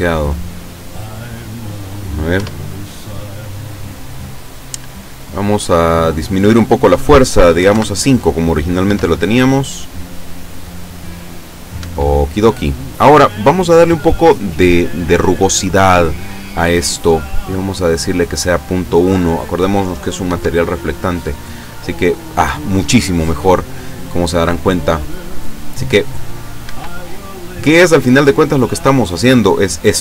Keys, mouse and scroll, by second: 0.5 click, 2.4 F12, 6.0 click, 7.7 KP_5, 7.8 KP_Enter, 8.9 F12, 11.8 Escape, 14.6-15.0 scroll up 2, 17.7 click, 20.3 F12, 26.7 Escape, 28.7 click.